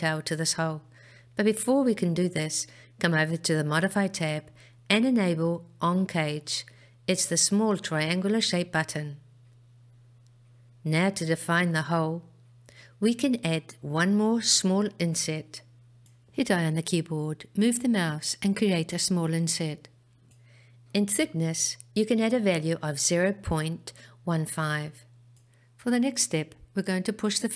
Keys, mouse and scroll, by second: 6.4 click, 9.5-13.5 middle drag, 14.4-17.4 scroll up 1, 17.4 i, 22.9-26.5 drag.